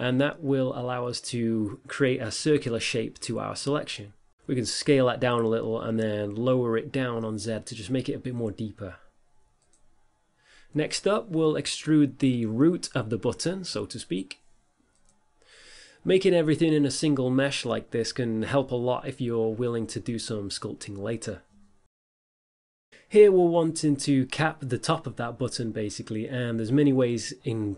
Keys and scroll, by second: 5.2 s, 7.6 g, 8.4 z, 13.6 Delete, 16.7 z, 19.3 s, 20.1 e, 21.4 s, 23.5 e.